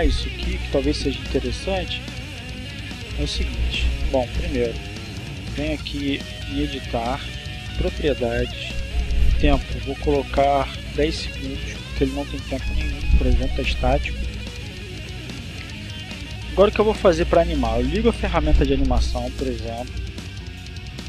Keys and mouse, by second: 2.2 click, 4.8 click, 7.3 click, 8.1 click, 8.9 click, 9.8-11.3 typing, 11.9-13.2 drag, 14.1-16.0 drag, 17.4 click, 20.7 click.